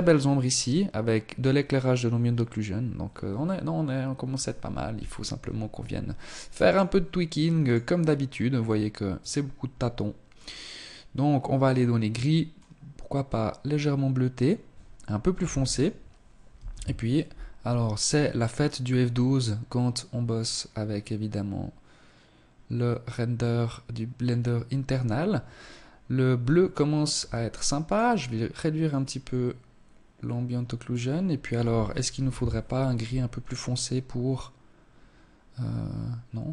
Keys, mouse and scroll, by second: 4.3 Escape, 5.2 right click, 5.6 right click, 6.4 click, 7.4-8.0 scroll down 1, 8.0 click, 8.0-8.8 scroll down 2, 14.3 ctrl+s, 26.0 Escape, 26.7 click, 27.7 click.